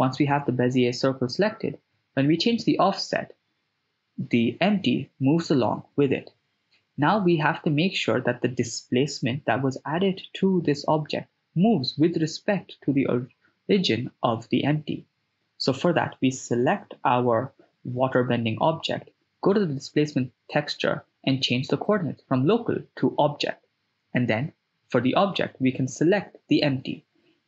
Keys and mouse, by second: 0.0-3.5 drag, 13.8 right click, 17.6 click, 21.4-23.0 drag, 24.3 click.